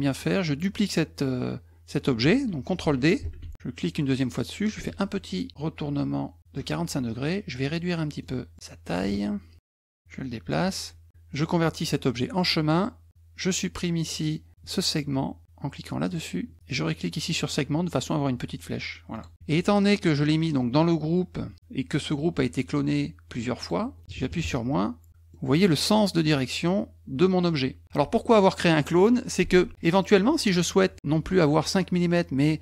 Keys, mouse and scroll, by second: 3.2 ctrl+d, 3.8 click, 4.7-6.5 ctrl+drag, 8.3 middle click, 9.0 ctrl+shift+click, 9.3 ctrl+shift+click, 10.0 ctrl+click, 12.4 click, 13.1-14.1 drag, 16.1 click, 17.4 click, 19.1 click, 23.6 click, 25.3 middle click, 27.8 1, 29.8 middle click.